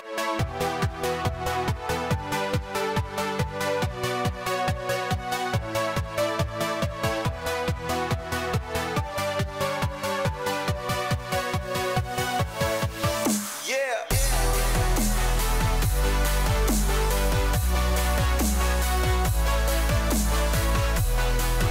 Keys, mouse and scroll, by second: 9.2 s, 15.8 z.